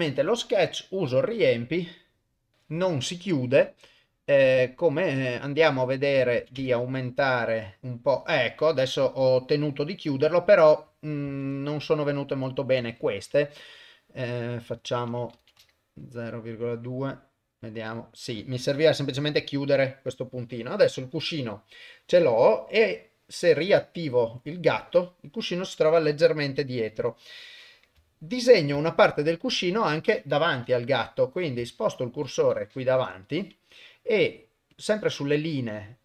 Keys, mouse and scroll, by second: 0.7 click, 3.5 middle click, 4.6-7.8 drag, 11.3 ctrl+z, 13.6-17.8 drag, 24.4 click, 24.9-26.7 middle drag, 26.9 KP_1, 28.1 ctrl+middle click, 28.8 shift+middle click, 30.5 KP_7, 31.9 shift+right click, 33.0 KP_0, 34.7 click.